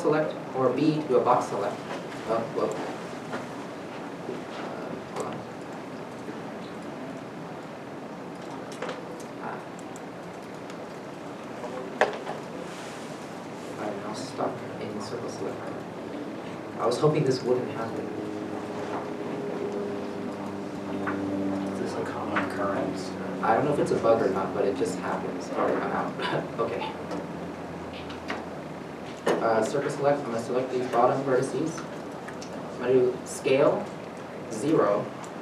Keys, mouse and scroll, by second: 0.8 c, 4.8 click, 8.7 b, 10.3 t, 13.7 t, 13.9 middle click, 16.3 middle click, 16.3 alt+a, 18.3 Tab, 18.7 Tab, 18.9-19.5 scroll, 19.5 middle click, 21.7 right click, 22.4 alt+a, 26.0 alt+a, 26.1 scroll up 1, 27.7-28.4 scroll up 1, 28.4 scroll, 28.5 1, 29.8 c, 32.1 c.